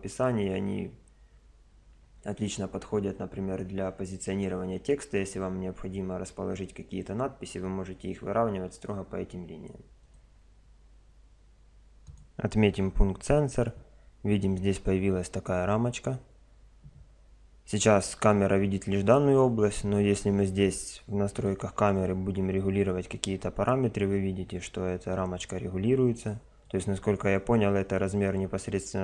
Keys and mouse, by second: 10.0 click, 12.0 click, 21.4-24.2 drag, 24.0 middle click.